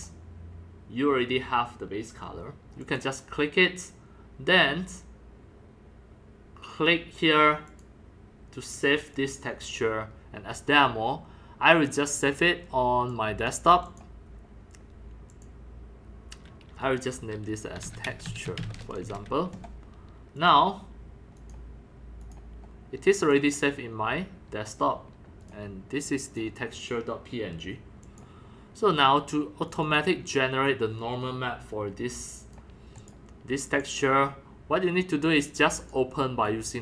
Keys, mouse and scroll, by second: 2.8 click, 4.5-6.7 drag, 7.7 click, 9.1-12.8 drag, 13.1-13.5 drag, 13.9 click, 15.3 click, 15.6-17.8 drag, 17.5-19.1 typing, 20.4-22.1 drag, 22.2 click, 23.2 click, 23.4 click, 25.4 click, 25.5-26.9 drag, 28.0 click, 29.7 click, 32.4 click, 32.7 click, 33.7 click, 35.7 click.